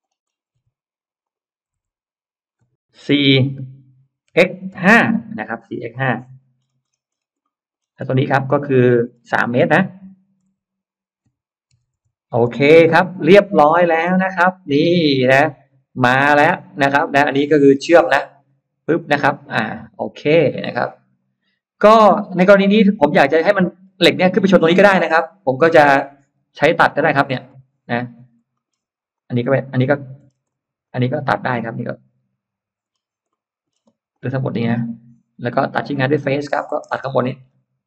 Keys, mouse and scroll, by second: 1.1 click, 1.1 m, 3.0 4, 3.2 Return, 4.2 x, 4.6 5, 4.8 Return, 5.4-5.8 scroll up 1, 6.2-7.4 scroll up 2, 7.2 middle click, 7.7 scroll down 1, 7.9 space, 8.1-8.4 scroll up 1, 8.4 click, 8.9 middle click, 9.6 m, 9.9 click, 11.6-12.3 typing, 11.8 Return, 12.6-13.3 scroll down 2, 13.0 Escape, 13.4 middle click, 14.2-15.3 scroll up 6, 15.2-16.6 middle drag, 17.2 scroll up 1, 17.6-21.8 middle drag, 21.9 scroll down 1, 22.4-23.0 scroll up 1, 23.5-24.8 scroll up 3, 24.6 middle click, 25.6 middle click, 26.0 scroll down 1, 27.4 click, 28.3-28.6 scroll up 1, 28.4 middle click, 29.0 click, 29.6 click, 30.2 space, 30.3 click, 30.7 click, 32.7 middle click, 32.8 scroll down 1, 33.2 middle click, 33.6 space, 34.0 click, 36.1 click, 36.8-37.2 scroll up 1, 37.4 scroll down 1.